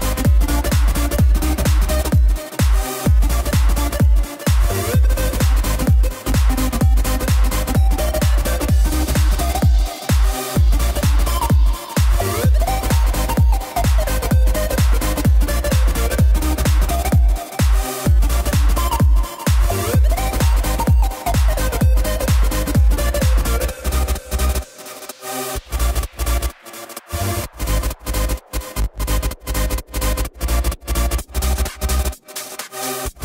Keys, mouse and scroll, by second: 2.0 ctrl+a, 2.2 drag, 2.5-3.1 middle drag, 3.1 scroll up 1, 3.2 click, 3.6 shift+middle click, 3.9 Tab, 4.2 middle click, 4.8 click, 5.5 KP_3, 6.6 click, 8.8 Tab, 9.0 drag, 9.3 scroll down 2, 9.4-10.2 middle drag, 10.2 click, 10.3 ctrl+a, 10.9-12.5 middle drag, 12.5 click, 13.0-13.8 middle drag, 13.8-14.3 scroll up 1, 14.3 Tab, 15.2 click, 16.0 click, 16.3 middle click, 17.2 shift+click, 17.5 middle click, 18.0 KP_3, 18.6 ctrl+b, 27.0 Tab, 27.3 click, 27.5 scroll down 2, 29.5-30.2 middle drag, 30.2 click, 30.8 ctrl+a, 31.4 scroll up 1, 31.6 shift+middle click, 32.0 Tab, 32.2 a, 32.8 ctrl+b.